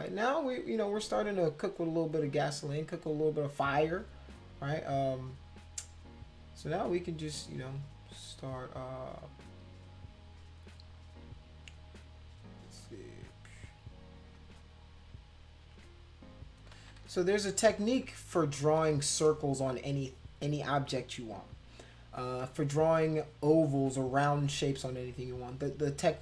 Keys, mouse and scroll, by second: 9.3 click, 12.5 click, 13.3 shift+click, 14.1 click, 14.6 shift+click, 16.3 click, 16.8 ctrl+z, 17.0 ctrl+z, 18.7 ctrl+z.